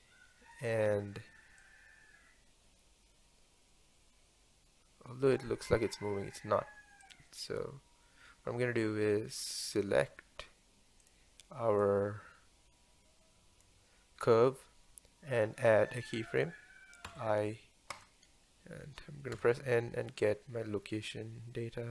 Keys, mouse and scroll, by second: 1.7-4.7 drag, 7.1 click, 9.8 click, 11.1 click, 19.4 n.